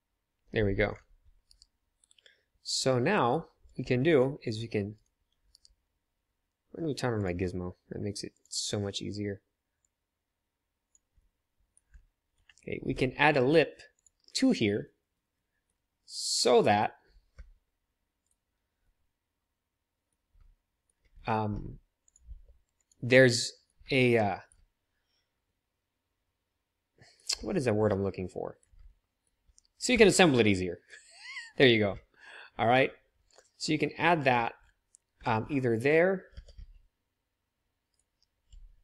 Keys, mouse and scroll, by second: 1.4 KP_1, 1.9 KP_3, 2.8-5.6 drag, 3.6 g, 5.4 KP_1, 5.6-7.1 middle drag, 7.1-14.0 drag, 12.9 g, 14.0-18.2 middle drag, 17.3 r, 21.4 r, 22.2 g, 25.9-26.6 middle drag, 27.4 shift+middle click, 28.4-30.1 middle drag, 32.8-36.3 middle drag, 36.3-38.4 drag, 36.3 s, 38.4 ctrl+z.